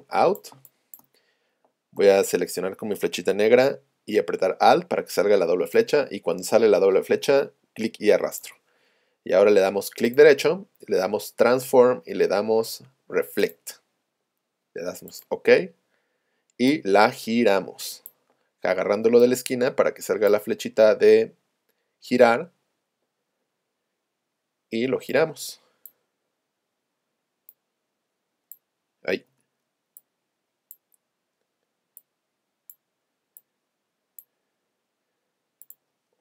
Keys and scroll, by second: 0.6 space, 2.0 v, 29.3 super+z.